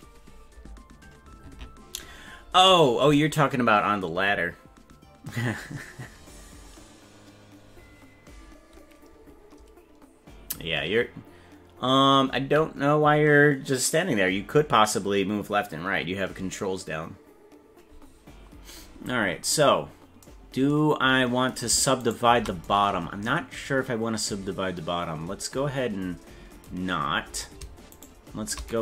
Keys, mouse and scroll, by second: 19.2-20.0 scroll up 7, 22.0 shift+right click, 26.8-27.1 scroll up 5, 27.9 shift+right click.